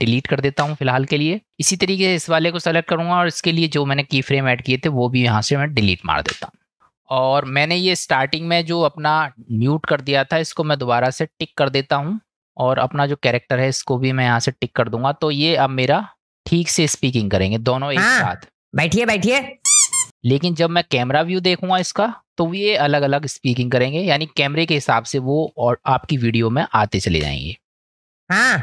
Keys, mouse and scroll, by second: 0.6 Delete, 3.1 click, 4.2-5.0 drag, 6.3 Delete, 7.6-8.9 drag, 11.3 click, 12.3 middle click, 16.8 space, 20.0 space, 20.2-20.8 middle drag, 21.7 KP_0, 24.8-25.4 drag, 27.2 space.